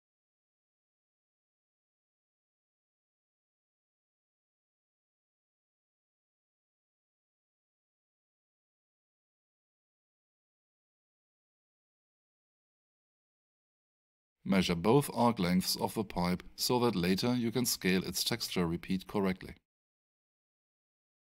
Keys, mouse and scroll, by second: 1.5 click, 5.4 alt+shift+click, 5.7 alt+shift+right click, 6.8 alt+shift+middle click, 7.6 alt+shift+click, 18.3 alt+click, 18.5 alt+shift+right click, 20.0 click, 20.5 alt+shift+right click.